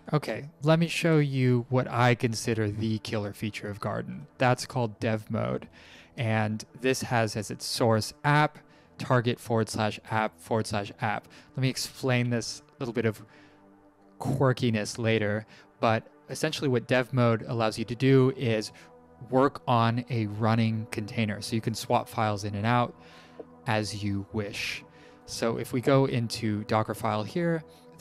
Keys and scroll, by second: 3.0 Up, 4.9 Down, 6.1 Up.